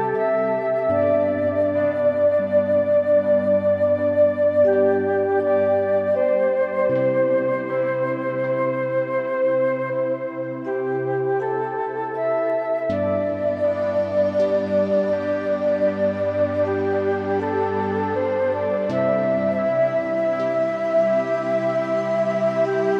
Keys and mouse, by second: 0.1 `, 0.7 click, 1.2 g, 3.4 click, 3.9 click, 4.9 middle click, 5.2 click, 6.1 middle click, 8.4 click, 9.7 click, 10.4 click, 10.7 click, 11.4 click, 12.7 click, 13.1 click, 13.3 click, 15.6 click, 16.8 click, 18.1 click, 18.8 click, 19.1 click, 19.2-22.9 drag.